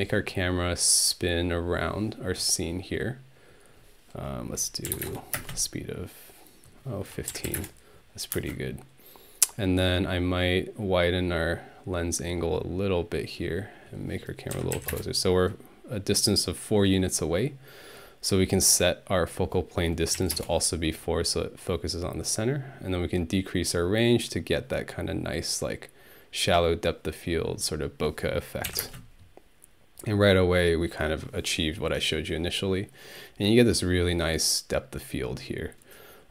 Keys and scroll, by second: 4.6-5.4 typing, 7.1-8.4 typing, 14.3-15.2 typing, 20.2 4, 20.3 Return, 28.7 Home, 28.8 space.